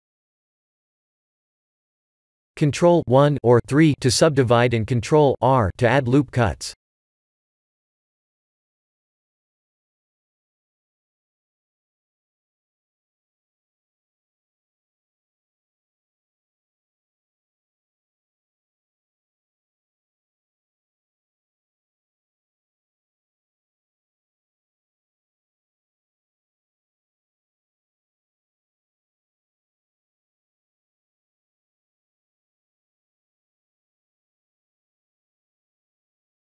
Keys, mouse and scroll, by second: 0.3 shift+z, 0.8-1.3 scroll down 5, 1.3 middle click, 2.7 click, 3.5 ctrl+1, 4.5 Tab, 4.9 ctrl+r, 6.2 Tab, 7.3 right click, 8.7 right click, 9.7-10.4 scroll down 1, 10.4 scroll down 4, 10.4 shift+middle click, 10.8 shift+middle click, 11.4 KP_3, 11.8 KP_1, 13.4 Tab, 14.0 middle click, 14.3 middle click, 14.4 middle click, 14.8 ctrl+r, 19.2 Tab, 19.7 middle click, 19.8 middle click, 22.0 middle click, 22.2 middle click, 22.6 middle click, 22.7 middle click, 22.8 Tab, 23.4 middle click, 23.8 middle click, 24.0 middle click, 25.1 ctrl+r, 27.5 ctrl+z, 29.0 KP_1, 30.2 shift+z, 31.2 click, 34.7 click, 35.6 shift+a.